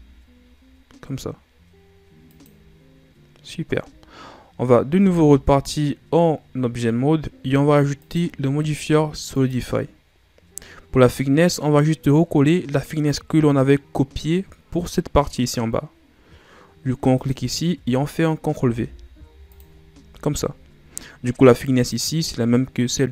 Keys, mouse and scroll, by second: 2.7-3.4 scroll down 4, 3.4-5.0 scroll up 3, 5.0 Tab, 7.9-11.0 drag, 17.2-19.6 drag, 21.8 right click, 23.0 right click.